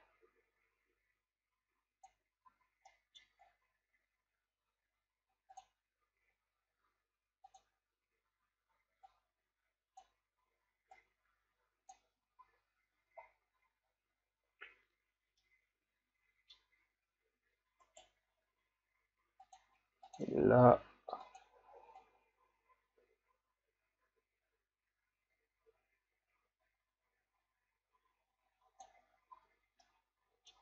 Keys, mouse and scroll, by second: 2.5 a, 2.9 middle click, 3.5 scroll down 2, 3.7 scroll up 2, 7.7 click, 11.1-12.5 drag, 12.5 a, 13.0 a, 13.5-15.2 scroll down 2, 15.2 scroll down 1, 15.4-17.9 middle drag, 17.9 right click, 19.8-21.3 drag, 29.4 a, 30.0 middle click.